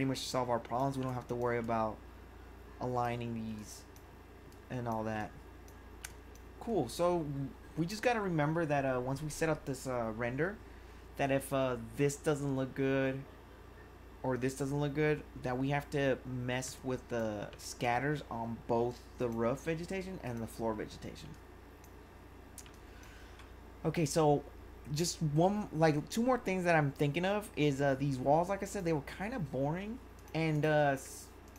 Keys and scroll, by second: 17.6 1, 22.8 1.